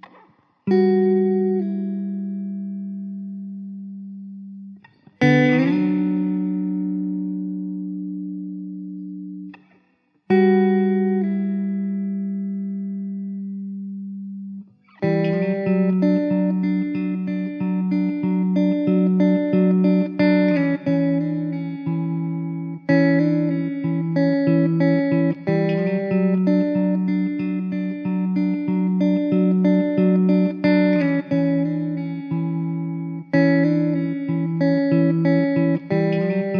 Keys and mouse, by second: 1.1 alt+w, 2.0 middle click, 10.2 alt+w, 14.5 ctrl+z, 15.9 ctrl+z, 20.0 ctrl+z, 25.7 alt+w, 26.5 alt+middle click, 30.8 alt+w, 32.2 middle click, 34.2 middle click.